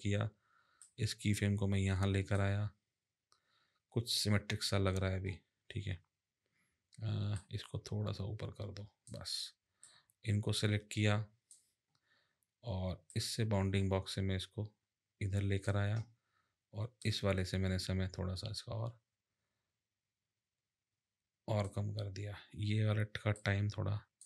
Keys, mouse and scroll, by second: 0.8 click, 7.3 click, 13.1 click, 17.0 click.